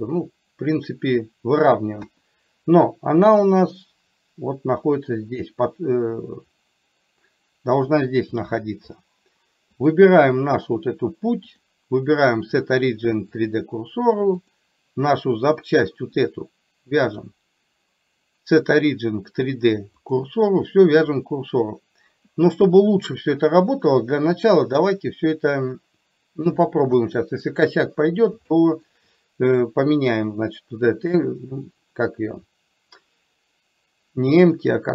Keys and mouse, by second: 2.0 KP_1, 11.6 click, 14.5 click, 17.1 click, 27.0 KP_3, 28.5 shift+middle click.